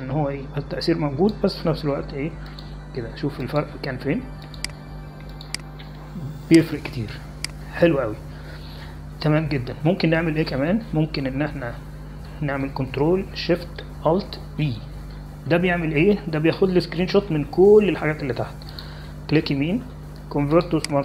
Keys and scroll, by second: 16.4 ctrl+alt+shift+e.